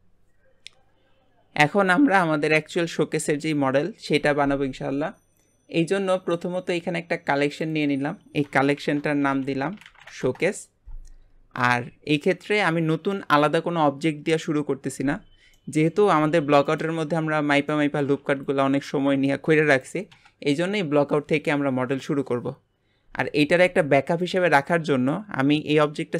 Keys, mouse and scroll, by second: 6.7 click, 7.7-10.8 drag, 11.6 click, 15.6-16.2 middle drag, 16.2 g, 17.2-17.7 scroll up 2, 17.7-20.8 middle drag, 23.4 scroll down 3, 23.6 g, 24.7-26.1 middle drag.